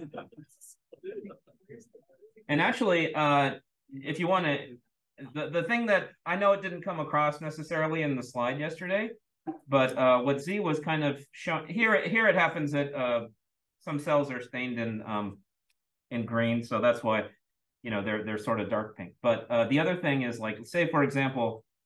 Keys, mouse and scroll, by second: 8.8 click, 10.0 click, 21.2 click.